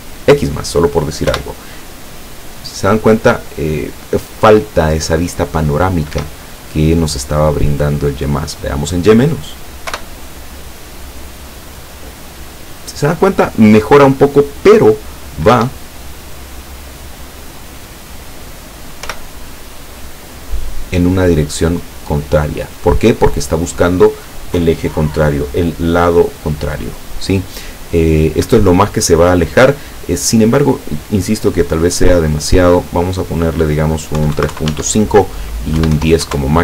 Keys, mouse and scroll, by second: 0.3 click, 1.3 p, 6.2 Escape, 7.8 click, 8.9 click, 10.0 p, 15.6 Escape, 16.6 click, 17.5 click, 19.1 p, 28.6 Escape, 30.4 click, 31.6 click, 32.3 click, 34.2 KP_3, 34.4 KP_Decimal, 34.5 KP_5, 34.7 Tab, 35.8 KP_1, 36.0 KP_0, 36.3 KP_Enter.